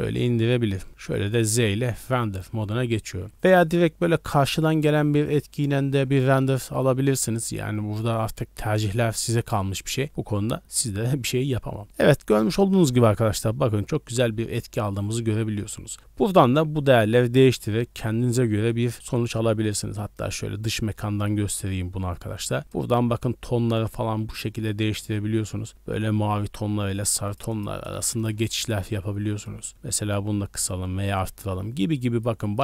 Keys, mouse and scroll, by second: 0.1 scroll up 1, 0.5 z, 19.3 scroll down 3, 19.4 middle click, 19.9 middle click, 20.7-21.6 scroll down 3, 22.4-22.7 scroll down 3, 24.3-27.4 drag, 27.5 click, 29.4-32.3 drag, 32.4 click.